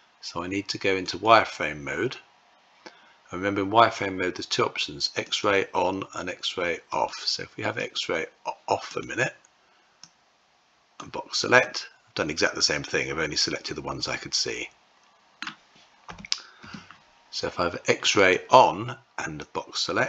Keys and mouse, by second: 1.0 click, 5.0 click, 6.7 click, 7.5 click, 8.7 click, 9.9 click, 11.4-15.2 middle drag, 17.9 click, 19.2-20.0 drag.